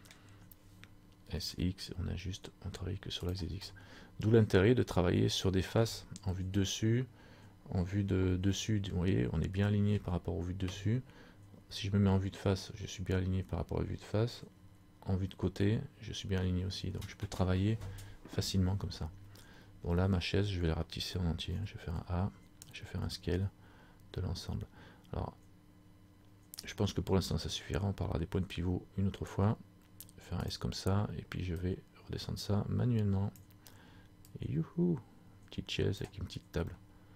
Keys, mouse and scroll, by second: 0.3 scroll down 1, 1.4 s, 3.7 scroll up 1, 3.9 middle click, 4.7-5.2 scroll down 3, 5.5-6.5 scroll down 1, 6.5 KP_7, 8.6 shift+scroll up 1, 8.7 shift+middle click, 11.6 KP_1, 14.7 KP_3, 31.7 click, 36.9 middle click.